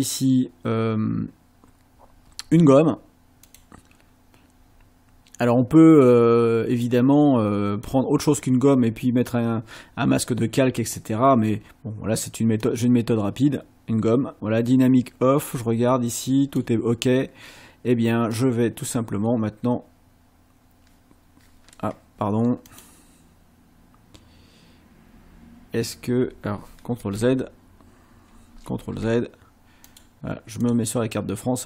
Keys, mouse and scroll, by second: 3.5 click, 6.9-8.1 drag, 10.2-10.6 scroll down 1, 12.6-14.5 scroll down 1, 14.5-15.8 scroll down 1, 15.8-16.8 scroll up 1, 18.4 click, 22.7 click, 27.0 ctrl+z, 28.7 ctrl+z, 29.9 click, 30.7 click.